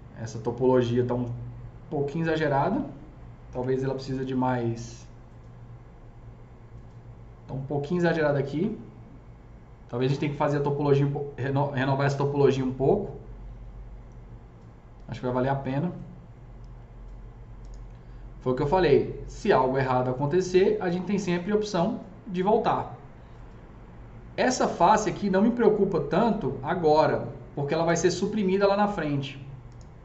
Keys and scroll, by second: 3.5 KP_0.